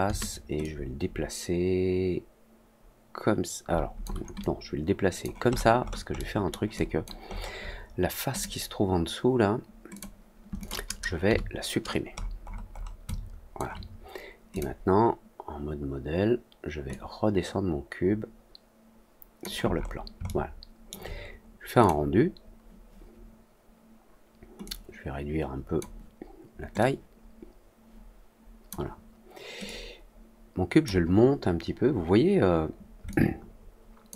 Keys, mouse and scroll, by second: 0.5 click, 4.3 alt+click, 5.4 alt+middle click, 5.8 alt+middle click, 6.1 alt+middle click, 6.7 alt+click, 7.2 alt+middle click, 8.2 click, 9.9 click, 10.5 click, 12.1 middle click, 12.5 middle click, 12.7 middle click, 13.0 alt+click, 14.4 click, 16.8-19.3 drag, 19.7 middle click, 20.2 alt+middle click, 21.7 click, 24.6 click, 26.7 click, 29.6-30.8 drag, 33.0-34.0 alt+drag.